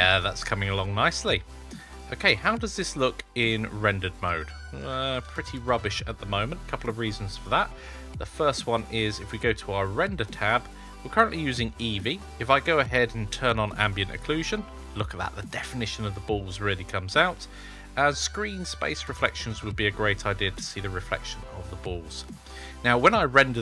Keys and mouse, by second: 3.5 click, 4.2-5.4 middle drag, 9.2 click, 13.5 click, 19.0 click, 19.9-22.9 middle drag.